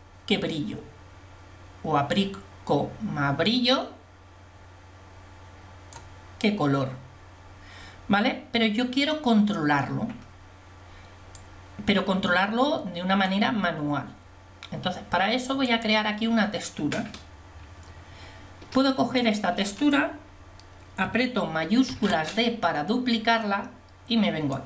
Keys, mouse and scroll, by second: 11.4 click, 22.3 shift+d.